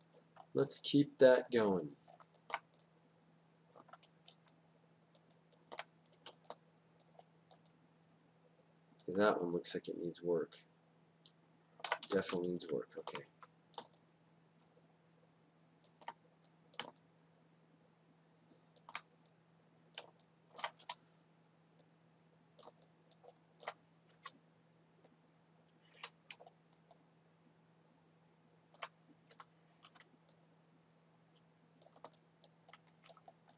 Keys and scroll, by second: 13.0 w, 21.8 e, 25.1 Down, 30.3 Down.